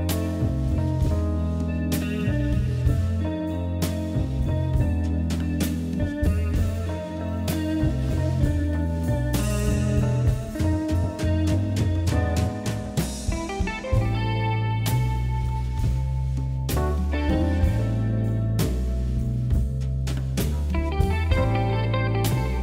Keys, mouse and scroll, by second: 0.1 ctrl+r, 1.3 KP_7, 2.0 ctrl+r, 3.4 s, 5.8 ctrl+r, 6.7 middle click, 7.1 KP_3, 7.9 g, 10.6 Tab, 10.9-11.6 middle drag, 12.1 right click, 12.3 click, 12.5-13.2 middle drag, 13.2 KP_1, 14.8-15.4 scroll down 1, 15.4 a, 15.7-16.2 shift+middle drag, 16.2 g, 20.2-20.7 middle drag, 20.7 Tab, 21.1 m, 22.3 KP_1.